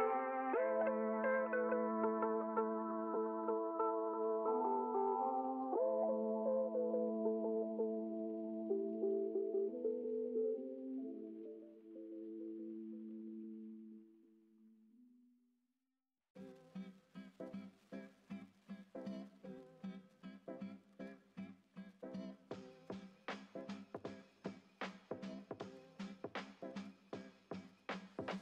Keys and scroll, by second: 14.4 Escape, 23.3 ctrl+space, 23.6 ctrl+space.